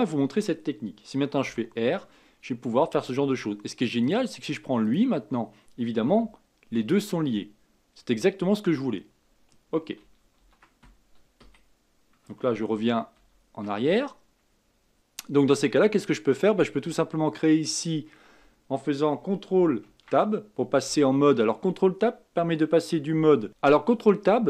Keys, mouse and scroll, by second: 1.4 r, 4.8 click, 6.1 r, 11.4 Escape, 12.7 ctrl+z, 13.1 ctrl+z, 14.6-15.9 scroll down 4, 19.8 ctrl+Tab, 23.5 Left.